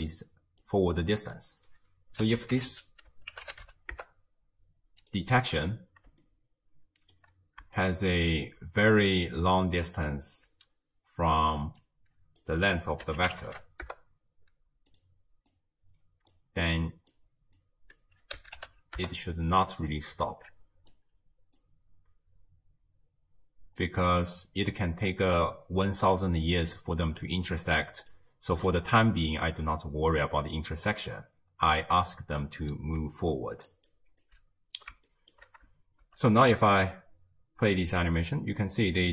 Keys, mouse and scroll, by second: 0.6 click, 2.7 s, 5.8 scroll down 1, 6.3-9.4 shift+middle drag, 9.4 d, 9.6 click, 10.1 d, 11.8 drag, 15.5 drag, 16.8 click, 17.6 drag, 20.3 alt+click, 21.6 drag, 25.4-26.2 scroll up 2, 27.9 d, 28.1 right click, 28.5 d, 30.9-31.6 scroll down 1, 31.6-32.1 scroll down 1, 32.1 click, 33.0-34.3 typing, 33.3 click, 33.9 right click, 34.7 scroll down 2, 35.1-36.0 shift+middle drag, 36.0 shift+space, 36.7 space.